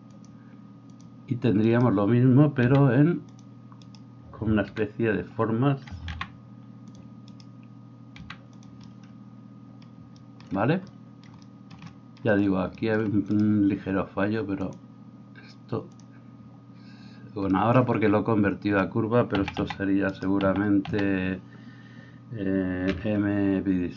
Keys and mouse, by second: 2.6 g, 4.6-7.3 middle drag, 4.6 f, 6.1 g, 7.3 right click, 7.5-13.3 middle drag, 8.2 g, 13.3-14.6 right drag, 14.6-22.9 drag, 20.1 middle click, 20.1 right click, 20.5 a, 20.8 a, 22.9-23.9 right drag, 22.9 m.